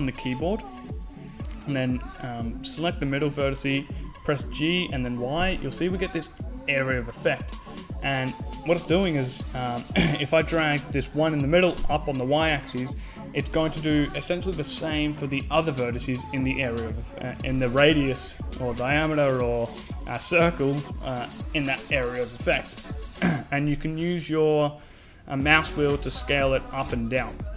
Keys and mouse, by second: 0.3-1.6 drag, 1.6 right click, 2.9 g.